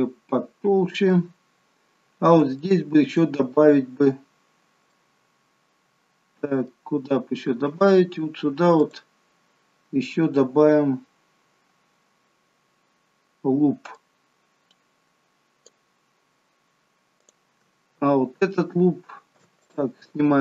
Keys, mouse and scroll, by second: 1.9 scroll down 3, 2.6 shift+middle click, 3.5-4.8 scroll up 2, 4.8 middle click, 8.8 click, 13.9 click, 17.2 click, 19.5 click.